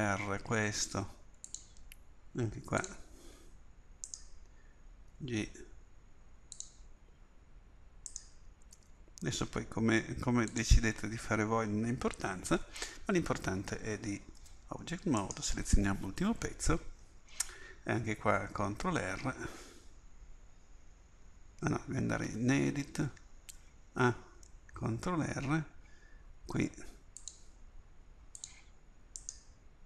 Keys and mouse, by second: 4.1-6.6 drag, 5.1 g, 8.2-10.5 drag, 8.8 g, 14.4 Tab, 15.3-17.6 drag, 18.9 ctrl+r, 22.3 Tab, 24.0 a, 24.9 ctrl+r.